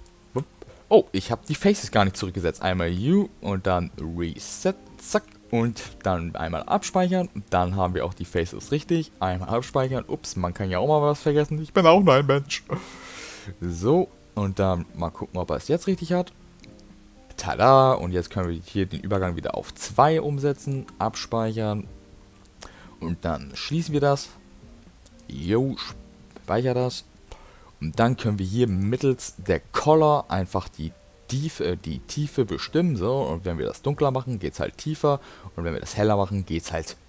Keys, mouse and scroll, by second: 0.8 middle click, 2.2 u, 5.3 middle click, 7.2 click.